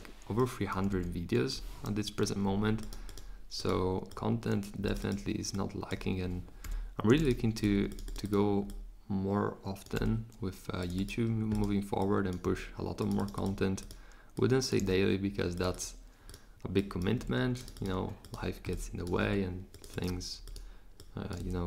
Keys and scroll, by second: 0.9 3, 2.0 Return, 6.6 3, 10.0 4, 12.5 4, 17.2 4, 19.2 4.